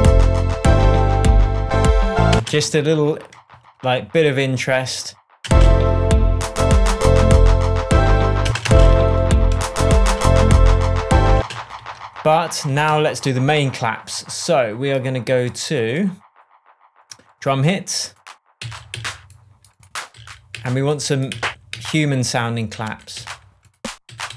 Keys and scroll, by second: 2.3 space, 5.4 space, 8.4 space, 9.3 shift+space, 9.5 shift+Tab, 11.3 space, 11.7 super+s, 12.6 shift+super+s, 12.8 shift+Tab, 18.5 Down, 20.1 Down, 23.1 Up.